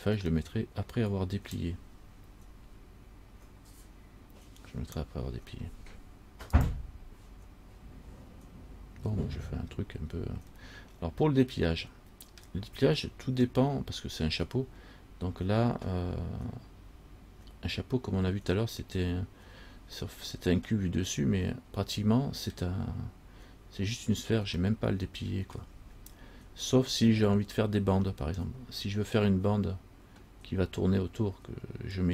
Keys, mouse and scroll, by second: 0.7 middle click, 10.8 middle click, 20.2 middle click, 24.8 middle click, 27.9-28.2 scroll up 3, 28.6 scroll down 1.